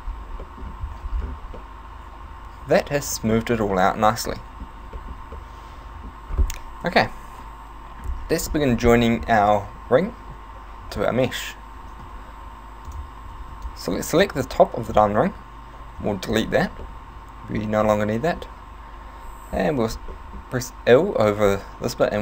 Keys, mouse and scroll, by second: 0.4 middle click, 1.0 Tab, 1.6 middle click, 3.5 Tab, 3.8 middle click, 4.1 middle click, 4.4 middle click, 5.0 shift+middle click, 5.4 middle click, 6.8 KP_1, 12.0 b, 13.3 a, 13.5 b, 16.0 x, 16.8 middle click, 17.8 middle click, 19.5 l, 20.1 middle click.